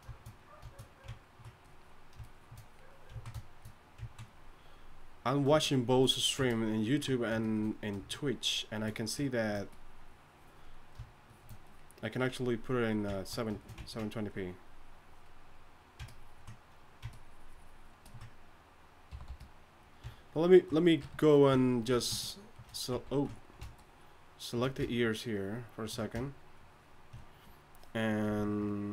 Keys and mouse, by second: 1.6-7.1 drag, 13.3 click, 14.3-19.1 drag, 19.1 g, 19.2 f, 21.0 KP_3, 23.2 ctrl+z.